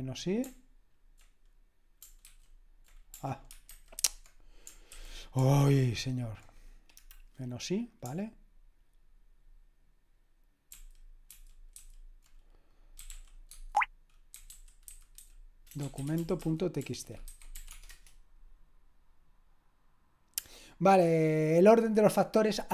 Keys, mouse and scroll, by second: 0.0-0.2 typing, 3.7 ctrl+e, 5.6 c, 11.3 alt+f, 11.8 Delete, 12.9-13.6 typing, 15.2 alt+f, 17.3 alt+f, 17.3-18.4 typing.